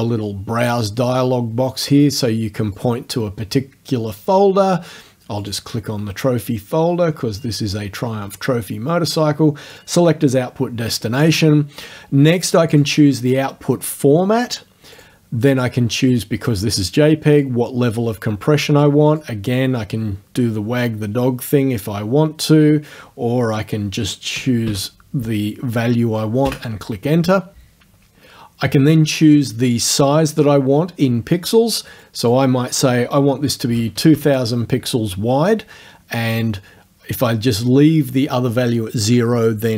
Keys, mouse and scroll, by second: 0.7 click, 2.8 click, 5.5 click, 9.8 click, 12.8 click, 15.0 click, 17.5-19.4 drag, 19.5 right click, 24.4 KP_7, 24.7 KP_5, 26.5 KP_Enter, 32.1 click, 33.7 KP_2.